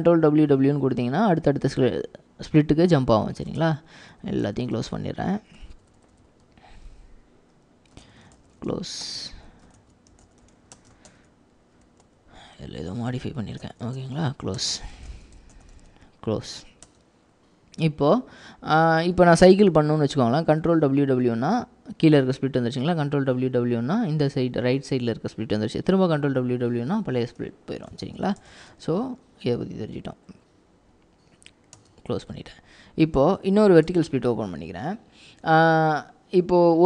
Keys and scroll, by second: 3.7 ctrl+w, 4.5 ctrl+w, 5.8 ctrl+w, 6.5 ctrl+w, 6.9-17.4 typing, 20.7 ctrl+w, 20.9 ctrl+w, 23.0 ctrl+w, 23.2 ctrl+w, 26.2 ctrl+w, 26.3 ctrl+w, 27.8-29.4 typing, 31.9 Return, 33.6 ctrl+w, 34.1 ctrl+v.